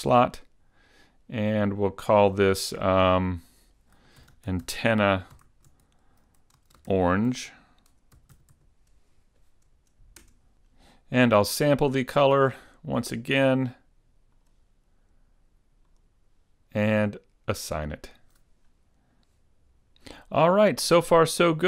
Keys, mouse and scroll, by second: 0.3 click, 1.9 click, 3.4 click, 11.9 click, 13.1 click, 18.0 click, 18.8 middle click.